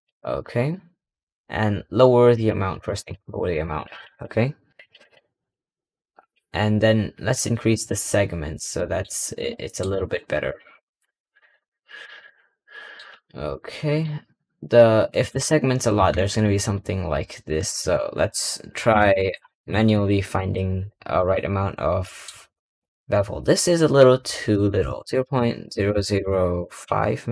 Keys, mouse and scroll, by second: 0.3-2.2 scroll up 2, 2.2-8.6 drag, 8.6-9.4 scroll up 3, 8.8 middle click, 9.4-9.8 shift+middle drag, 10.3 KP_Decimal, 10.7-11.5 scroll up 8, 11.5-12.3 middle drag, 13.0 scroll up 1, 13.4 middle click, 17.5-19.3 drag, 21.9 middle click, 22.4 scroll down 3, 22.7-24.4 middle drag, 24.4-26.0 drag.